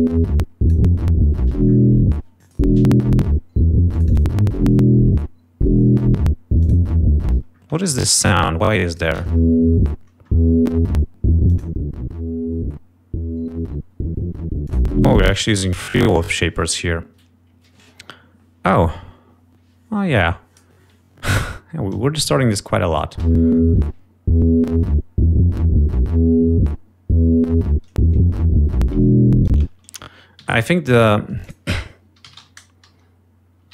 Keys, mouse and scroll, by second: 2.5 click, 3.9 click, 6.3 click, 7.5 click, 8.0 space, 8.5-9.5 drag, 9.5 space, 9.7 ctrl+scroll up 2, 11.7 click, 14.9 click, 15.3 space, 15.5 click, 21.0 click, 22.6 click, 23.5 space, 29.7 space, 30.6 F1.